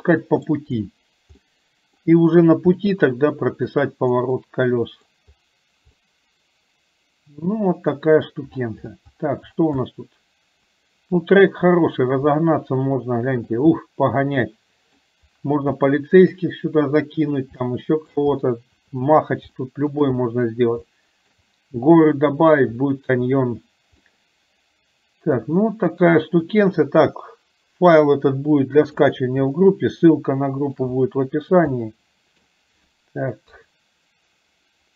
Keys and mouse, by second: 1.4 middle click, 3.0 middle click, 4.4 middle click, 6.1-8.4 middle drag, 9.9-11.3 middle drag, 12.5 shift+middle click, 13.9-15.0 middle drag, 15.9 shift+middle click, 17.6 shift+middle click, 19.5 shift+middle click, 20.9 shift+middle click, 24.1-25.5 middle drag, 26.8-29.3 drag, 29.6-30.9 shift+middle drag, 31.8 middle click, 33.5 KP_3.